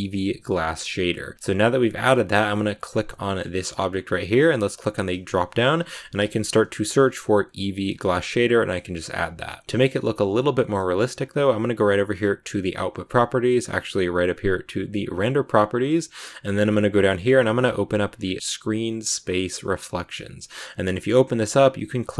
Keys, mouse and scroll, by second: 0.0 click, 2.1 right click, 3.0-9.3 middle drag, 9.6-22.1 middle drag.